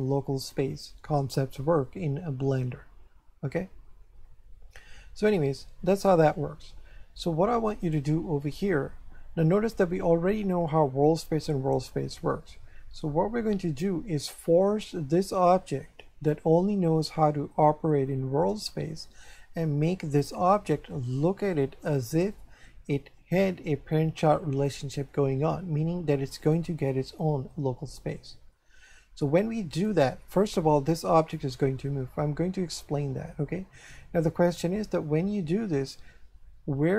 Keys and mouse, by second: 7.8 right click, 26.4 click, 29.7 click.